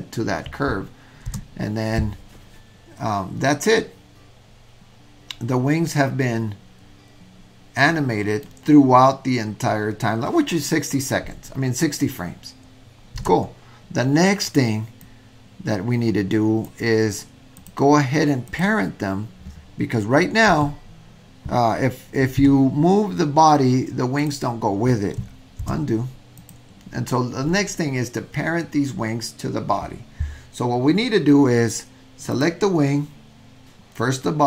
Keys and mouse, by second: 1.3 space, 4.7-5.2 middle drag, 6.9-8.5 middle drag, 13.3 space, 15.1-16.7 drag, 18.5 drag, 20.5 w, 22.4 g, 25.7 super+z.